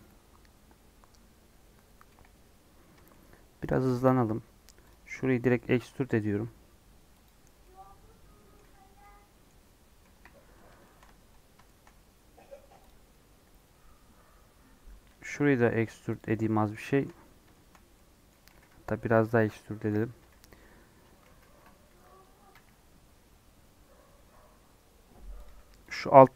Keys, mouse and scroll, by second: 3.0-4.0 shift+middle drag, 4.0 scroll up 2, 4.8 click, 5.0 middle click, 5.9 e, 7.4 scroll down 1, 7.6-8.6 middle drag, 8.6 Tab, 8.8 scroll down 1, 9.0 middle click, 10.0 KP_1, 10.8 shift+middle click, 11.0 Tab, 11.2-12.8 scroll up 8, 11.6 shift+middle click, 12.8 click, 15.0 e, 16.2 middle click, 17.1 scroll up 2, 17.4-18.5 shift+middle drag, 18.5 g, 20.9 scroll down 1, 21.2 ctrl+z, 21.4 ctrl+z, 22.4 e, 25.5 2, 25.9 click, 26.1 middle click.